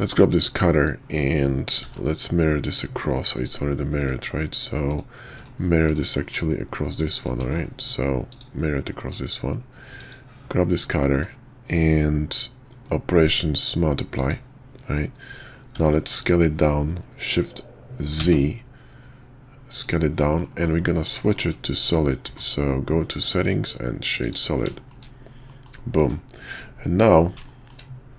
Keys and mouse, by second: 1.8 alt+x, 4.0 ctrl+`, 6.9 shift+click, 7.4 alt+x, 8.3 click, 10.0 click, 11.1 q, 15.7 s, 20.2 middle drag, 20.8 middle click, 21.2 shift+middle click, 22.2 q, 24.8 shift+middle click, 25.5 middle click, 27.5 shift+drag.